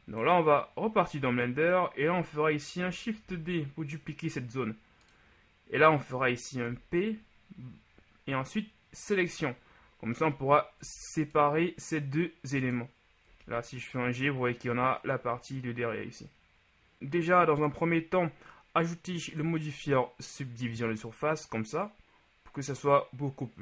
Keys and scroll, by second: 3.3 shift+d, 6.8 p, 11.0 Tab, 13.6 g.